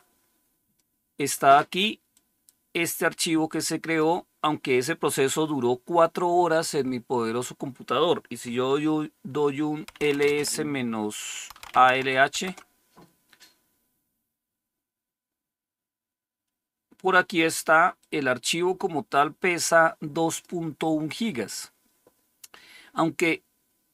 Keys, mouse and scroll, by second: 1.8-2.6 typing, 2.0-4.8 drag, 9.6-12.3 typing, 17.8-20.3 drag.